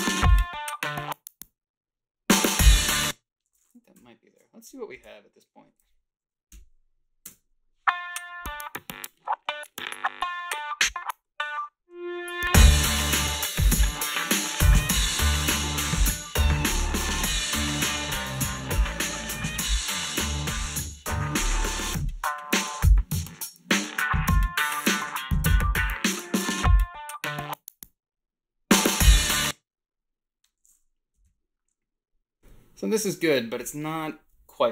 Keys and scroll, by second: 2.8 space, 6.5 Home, 7.3 space, 29.2 space, 31.2 =, 31.2 =.